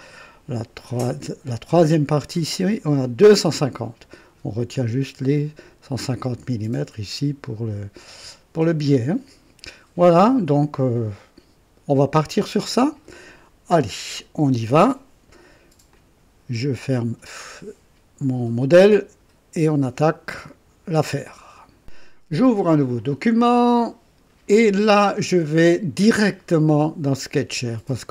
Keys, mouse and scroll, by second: 15.9 ctrl+click, 21.8 click, 23.3 click, 27.5 click.